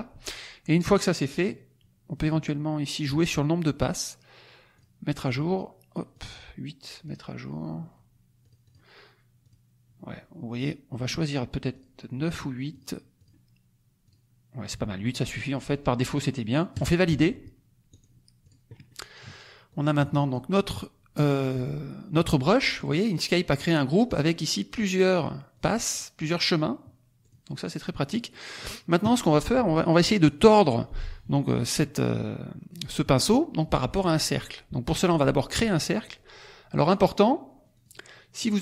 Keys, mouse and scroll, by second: 3.0 click, 4.7 click, 6.1 click, 7.0 click, 8.4-8.9 drag, 9.4 click, 10.4 click, 11.7 click, 12.7 click, 13.1 click, 14.0 click, 16.6 click, 17.8 click, 18.3 click, 18.8 middle click, 19.6-20.5 drag, 24.0 click, 24.6 click, 25.1 click, 25.5 click, 25.9 click, 26.2 click, 27.3 click, 28.2 middle click, 31.8 click, 33.0 click, 37.7 click, 38.4 click.